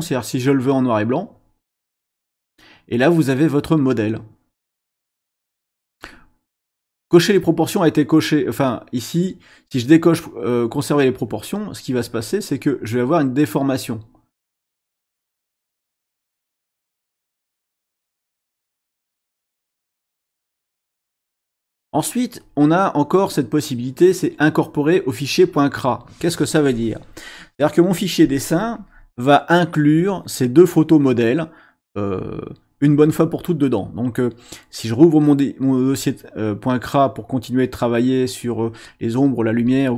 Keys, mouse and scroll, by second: 11.2 click, 12.0 click, 13.4 click, 14.8 click, 20.4 click, 22.4 click, 25.1 click.